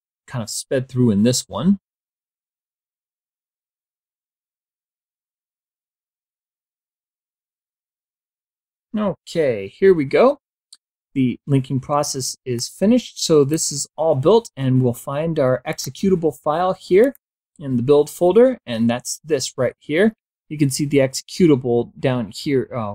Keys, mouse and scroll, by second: 11.8-13.0 drag, 15.0 click, 16.3 click.